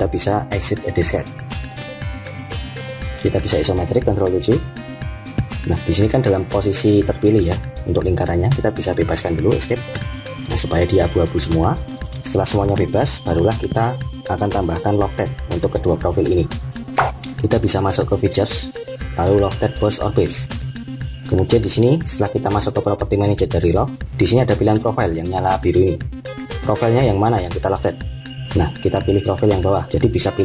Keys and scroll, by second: 4.0 7, 9.6 Escape.